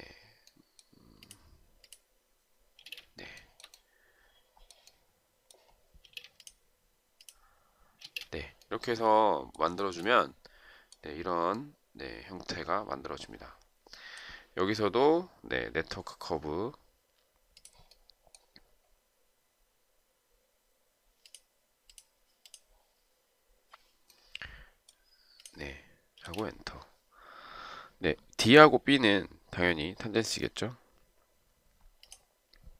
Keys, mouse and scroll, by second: 2.9 space, 3.5 shift+right click, 6.2 space, 8.1 space, 9.9 shift+right click, 26.3 space.